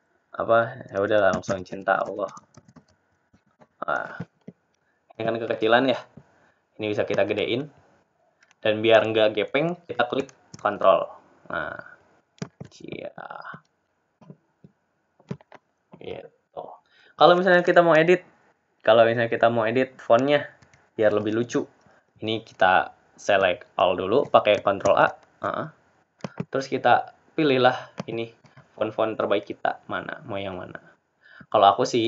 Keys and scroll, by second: 23.5 t.